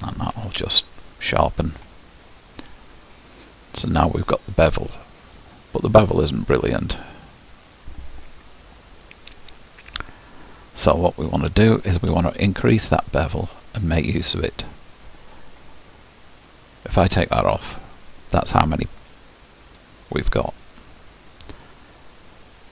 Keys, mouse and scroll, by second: 1.0 q, 2.0-17.5 middle drag, 17.5-18.5 drag, 18.5-22.7 middle drag.